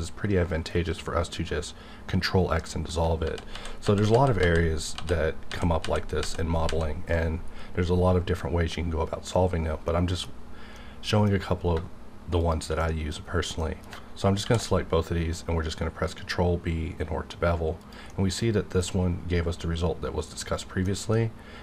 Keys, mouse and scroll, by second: 3.2 ctrl+z, 6.6 ctrl+z, 7.4-9.2 scroll down 1, 9.9 middle click, 10.2-10.7 scroll down 1, 10.8 middle click, 11.2 scroll down 1, 12.4 shift+click, 12.8 middle click, 13.2-13.5 scroll up 1, 13.5 middle click, 13.6 middle click, 14.4 ctrl+b, 17.9 click, 18.1-21.6 middle drag.